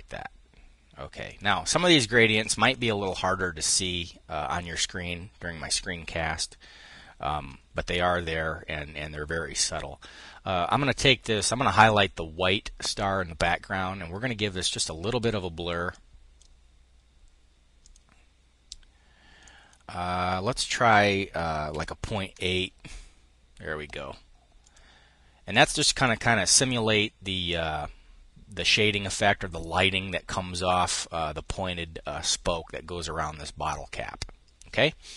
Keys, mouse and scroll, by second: 0.8-2.0 drag, 2.2-3.2 drag, 10.7 click, 14.2 click, 15.6 click, 17.4-19.3 drag, 21.3 ., 21.6 8, 22.0 Return, 24.2-25.5 drag, 26.1 click.